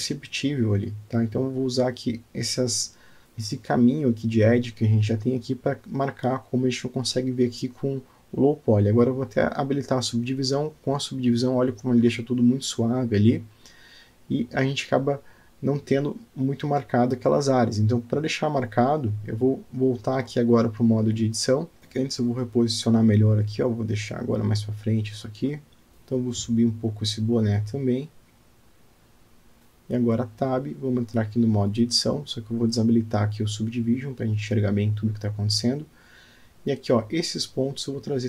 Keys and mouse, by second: 0.3 r, 2.2 g, 5.7 click, 6.3 alt+click, 7.0 alt+middle click, 7.3 alt+Tab, 7.6-7.9 alt+drag, 8.0-8.4 alt+middle drag, 10.4 click, 11.6 click, 12.2 click, 14.7-15.0 alt+middle drag, 15.7-16.1 alt+middle drag, 16.5-17.4 middle drag, 17.8 alt+shift+middle drag, 18.7 alt+shift+middle drag, 19.3-19.6 alt+drag, 20.3-20.7 alt+middle drag, 21.1-21.6 middle drag, 22.4 g, 25.9 Tab, 26.5 g, 29.8 alt+middle click, 31.6 Tab, 33.2 click, 34.3 click, 35.3 click, 37.6 click.